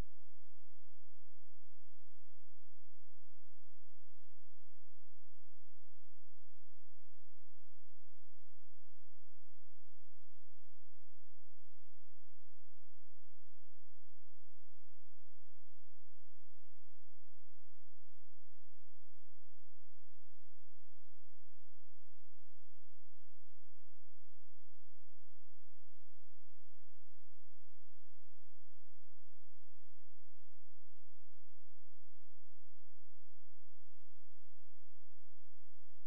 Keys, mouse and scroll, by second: 1.8 space, 3.3 shift+click, 6.5 scroll down 1, 7.3-8.2 scroll up 1, 8.6 shift+click, 14.7 click, 19.4 right click, 20.0 click, 20.6 scroll down 1, 21.8-23.5 scroll up 1, 23.8 click, 24.7 ctrl+click, 27.0 click, 30.3 right click, 30.9 click.